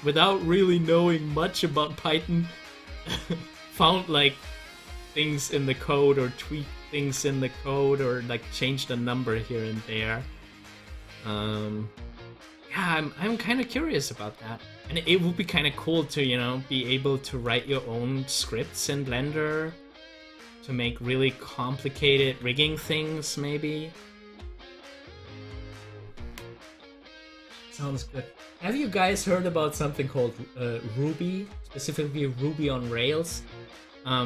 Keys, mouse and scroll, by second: 7.0 ctrl+z, 11.6-17.6 drag, 17.6 ctrl+z.